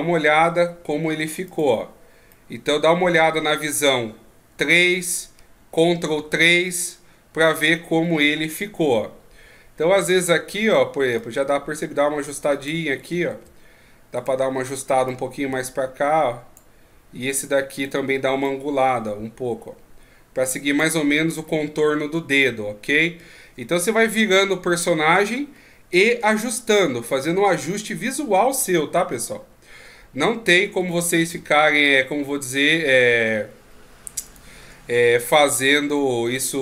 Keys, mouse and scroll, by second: 1.5 click, 2.3 middle click, 4.5 KP_3, 6.1 ctrl+KP_3, 10.2 right click, 11.2 click, 13.3 ctrl+z, 14.2 right click, 15.1 click, 17.7 right click, 18.4 click, 21.5 middle click, 24.0 KP_3, 25.5-26.4 scroll up 1, 26.4 ctrl+scroll down 2, 26.4-27.9 ctrl+scroll down 14, 27.9-28.7 scroll up 3, 30.9 Tab, 31.3 Tab, 31.7 right click, 32.2 Tab, 33.0-34.3 scroll down 9, 34.3 right click, 34.6 Tab, 34.9-35.7 scroll up 6, 36.3 middle click.